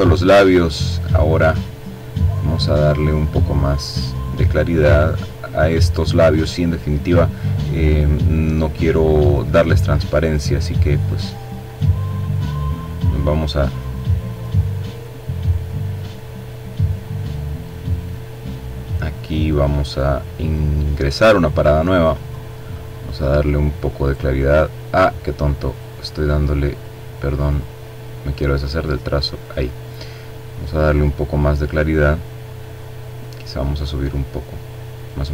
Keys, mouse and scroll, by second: 2.6-5.3 drag, 7.9 click, 9.7 click, 11.0 click, 12.9 click, 14.1-16.8 drag, 17.9 click, 21.0 click, 24.4 click, 25.3 click, 26.1 click, 28.0 click, 29.6-31.8 drag, 32.2-34.0 drag.